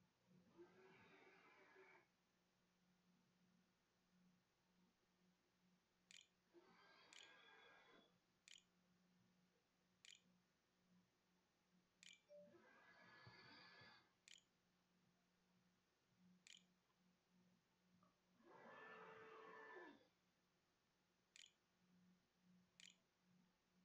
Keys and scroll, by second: 3.7-9.6 typing, 11.5 Tab, 12.6-13.7 typing, 14.1 End, 15.6 Return, 15.8 ', 16.3 ;, 19.8-20.7 typing, 22.6 ctrl+s.